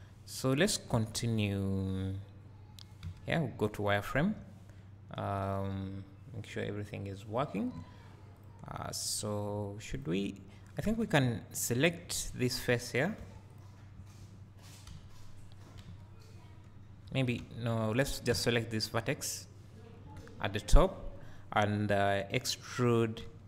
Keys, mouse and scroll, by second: 0.9 Tab, 1.3 scroll up 1, 4.2 1, 8.4 alt+click, 9.5 click, 11.2 `, 11.6-13.6 drag, 14.9 KP_1, 15.1 KP_1, 18.3 a, 19.1 click, 21.8 scroll, 22.6-23.2 scroll up 2.